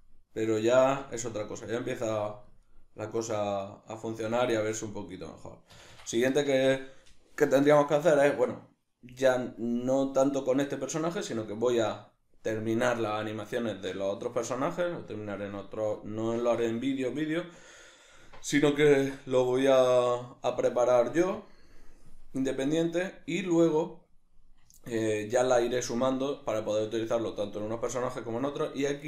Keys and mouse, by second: 5.8 Escape, 14.6 middle click, 19.6-21.4 ctrl+middle drag, 21.4-22.5 drag, 22.5-25.2 middle drag, 26.6-29.0 shift+middle drag.